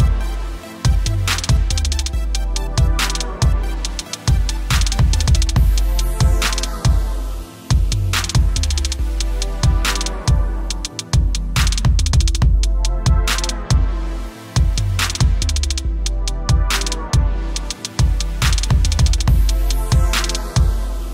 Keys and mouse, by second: 10.7 click, 11.2 KP_1, 11.6 Tab, 11.8 Tab, 14.7 click.